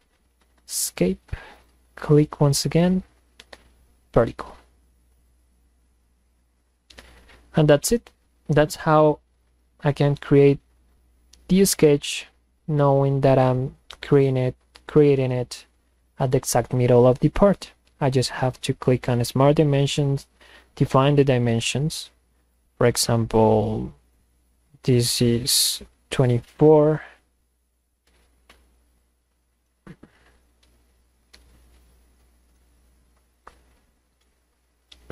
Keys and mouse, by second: 0.4 Escape, 1.6 click, 4.1 click, 5.2 click, 8.2-10.0 drag, 11.0-12.1 drag, 13.6-14.9 drag, 22.5 click, 23.3 click, 24.1 click, 25.5 drag, 27.0 click, 33.4 click, 34.9 click.